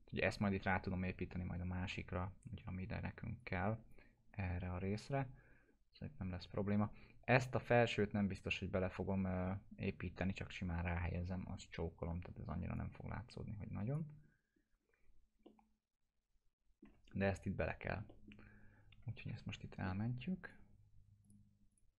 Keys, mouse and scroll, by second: 3.4-4.0 drag, 12.7-14.0 drag, 15.4-17.0 alt+middle drag, 17.1-18.1 scroll up 2, 18.1 middle click, 19.2 ctrl+s, 20.4 click.